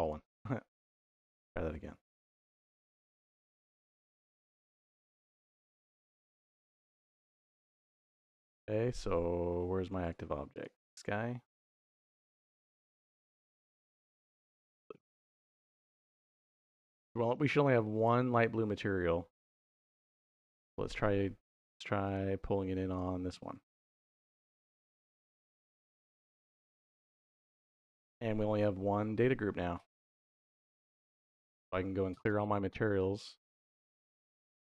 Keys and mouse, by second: 2.2 shift+y, 3.3 shift+y, 9.8 click, 10.4 click, 10.8 middle click, 11.4-12.1 middle drag, 13.2 shift+y, 17.8-20.3 drag, 21.9 click, 22.4 middle click, 22.7 click, 23.8 shift+y, 26.6 click, 32.2-33.9 drag.